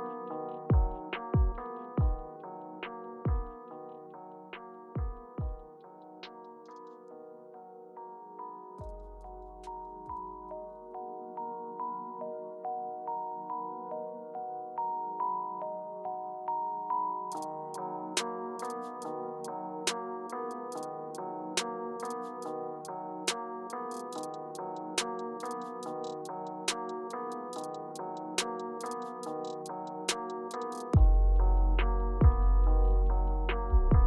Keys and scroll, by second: 0.9 space, 9.3 typing, 11.3-12.4 typing, 16.4-17.4 typing, 27.5-28.7 typing, 31.4-32.5 typing.